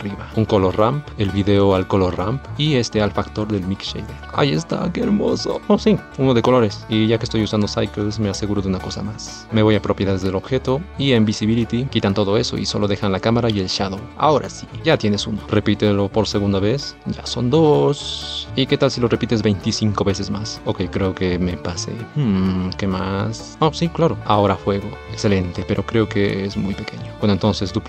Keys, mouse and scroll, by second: 1.1-4.2 drag, 4.2 space, 6.5 space, 9.3 click.